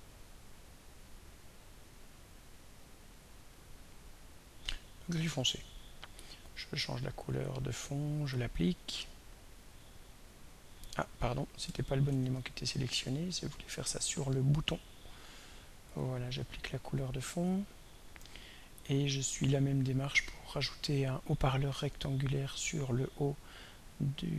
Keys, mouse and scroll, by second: 1.1-3.4 drag, 5.9 click, 7.5 right click, 9.8 click, 12.1 ctrl+y, 14.1 click, 16.0-17.8 right drag, 17.8 click, 20.7 click.